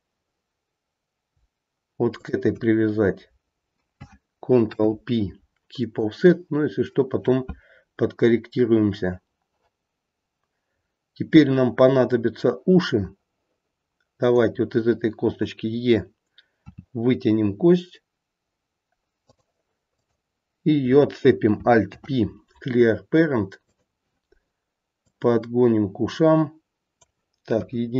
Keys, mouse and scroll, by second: 2.1 shift+click, 4.6 ctrl+p, 10.1-10.7 scroll down 1, 10.7-13.2 scroll down 1, 14.1 click, 16.7 e, 19.9 click, 21.8 alt+p, 25.0 click, 27.5 KP_1.